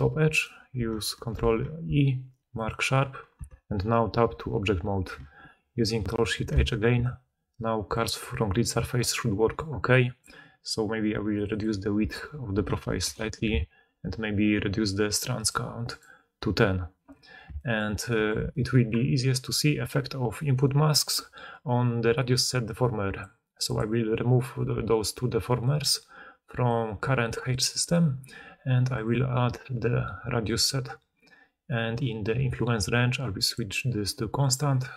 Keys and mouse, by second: 0.6-23.7 ctrl+drag, 1.2 ctrl+e, 3.2 Tab, 6.1 ctrl+shift+h, 17.7 shift+middle click, 23.7-25.7 middle drag, 25.7-34.9 drag.